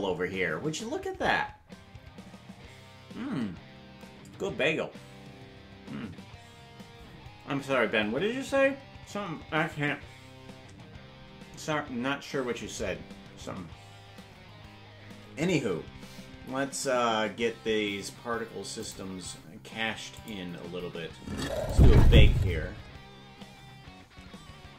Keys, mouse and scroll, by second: 18.9 click, 20.1 click, 21.6-22.8 drag.